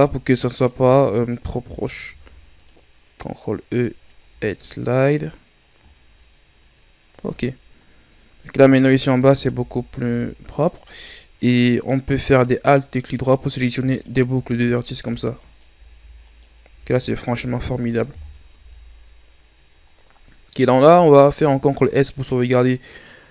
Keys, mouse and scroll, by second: 0.5-2.1 alt+right drag, 2.1 ctrl+e, 4.4 Tab, 4.9-6.2 scroll down 5, 6.2-7.2 ctrl+scroll down 2, 7.4-8.3 scroll up 6, 9.4 Tab, 10.0 a, 10.7 scroll down 2, 11.0-11.5 ctrl+scroll up 2, 11.5 middle click, 12.0-12.4 scroll down 1, 12.4-13.8 shift+scroll up 4, 13.8-17.9 alt+right drag, 18.0 KP_1, 18.6 Tab, 19.2-21.4 scroll down 5, 21.4 ctrl+s.